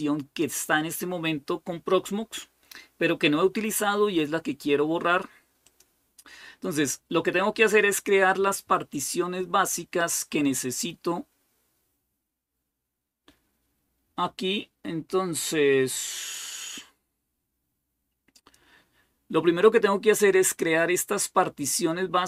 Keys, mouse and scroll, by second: 5.5 click, 11.5-12.5 scroll down 1, 18.1 click.